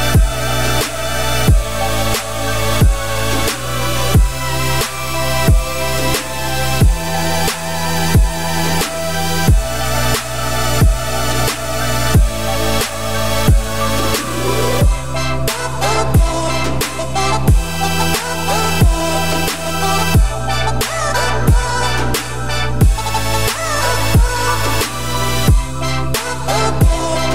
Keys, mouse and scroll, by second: 0.0-0.3 scroll up 1, 0.3-2.0 middle drag, 2.0-2.4 scroll up 2, 2.4 shift+middle click, 2.6-3.1 scroll up 2, 3.2 ctrl+r, 5.2 ctrl+z, 5.5 ctrl+z, 6.6 ctrl+shift+z, 7.1 ctrl+shift+z, 8.2 click, 10.7 g, 15.9 shift+click, 16.3 middle click, 16.7-17.1 scroll down 2, 17.1 middle click, 17.3-18.0 scroll up 1, 18.0 shift+click, 18.3 middle click, 18.6-19.1 scroll up 2, 19.1 g, 20.1 scroll down 2, 20.2 middle click, 20.7-21.2 scroll up 3, 21.2-23.4 middle drag, 23.4 g, 25.0 Tab, 25.3 `, 26.1 ctrl+s, 26.4-27.3 scroll up 11, 26.8 shift+middle drag.